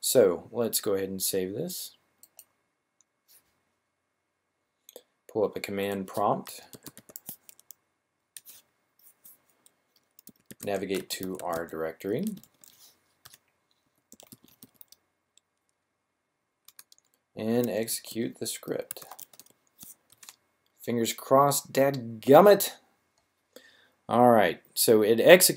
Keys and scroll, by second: 6.7 typing, 10.1-14.5 typing, 17.3-19.3 typing.